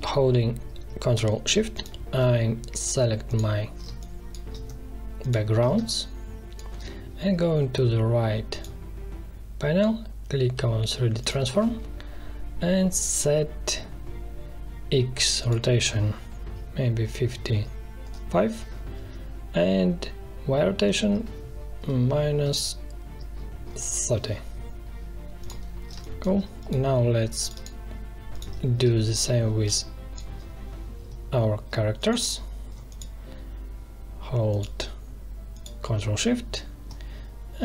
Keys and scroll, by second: 3.8 space, 5.7 space, 16.8 5, 18.0 Return, 21.8 -, 22.3 3, 23.0 0, 23.6 Return, 25.9 space, 28.8 space.